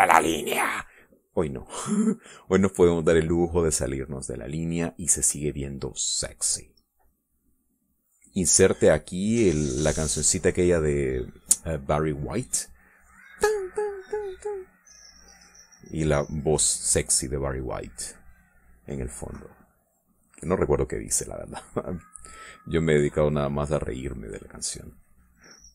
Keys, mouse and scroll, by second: 5.4 scroll up 1, 5.5 middle click, 6.3 middle click, 7.5-11.6 drag, 11.7 middle click, 12.3-14.0 drag, 14.5-17.9 drag, 18.2-22.9 drag, 23.3-25.0 drag, 25.3 middle click.